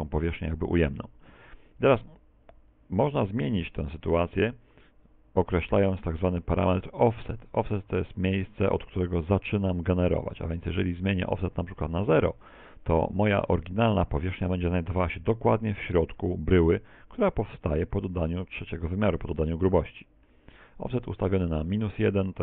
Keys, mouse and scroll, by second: 3.5 middle click, 4.9 middle click, 9.0 click, 12.4 click, 16.2 z.